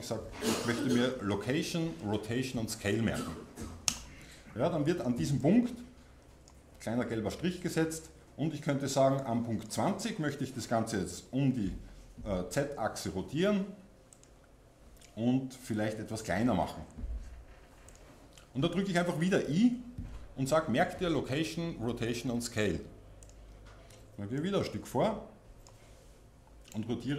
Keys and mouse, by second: 5.4-11.1 drag, 11.1 r, 14.2-16.3 drag, 16.3 s, 18.0-23.3 drag, 19.5-23.3 middle drag, 24.4-26.8 drag, 26.8 r.